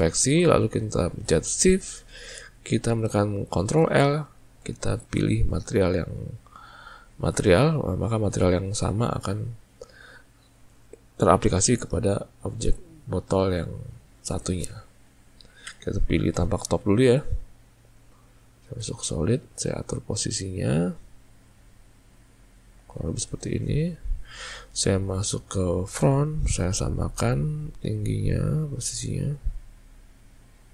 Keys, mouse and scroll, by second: 1.8 shift+click, 3.9 ctrl+l, 18.3-18.9 right drag, 18.3 z, 19.4 click, 20.2 click, 21.6 click, 23.8 click, 27.3 click, 28.1 click.